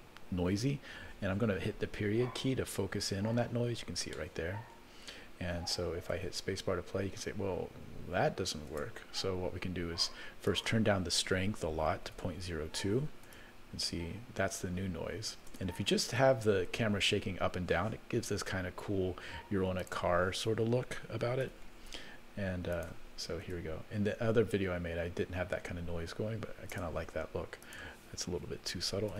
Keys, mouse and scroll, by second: 2.8 KP_Decimal, 3.7-4.6 scroll down 7, 4.1-5.9 middle drag, 6.1 space, 8.7 space, 10.4-12.4 drag, 13.2 space, 15.4 space, 19.8-21.5 drag, 22.8 click, 23.4 space, 26.8 space, 27.6-29.1 drag.